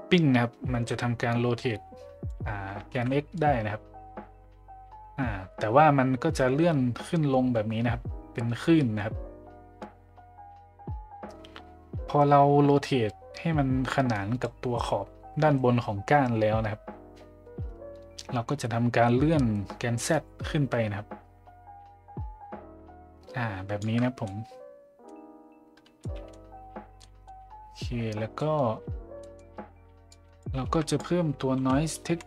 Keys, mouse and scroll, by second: 0.8-2.3 drag, 2.9 ctrl+z, 3.3-14.5 drag, 20.1-23.8 drag, 24.2-25.1 middle drag, 26.0 middle drag, 27.0 middle drag, 29.2 middle click, 30.1 click, 30.6 shift+a.